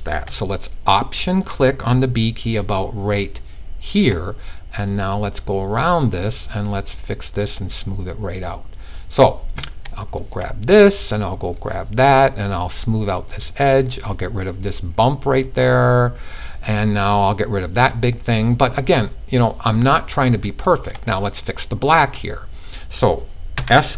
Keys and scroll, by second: 23.1 s.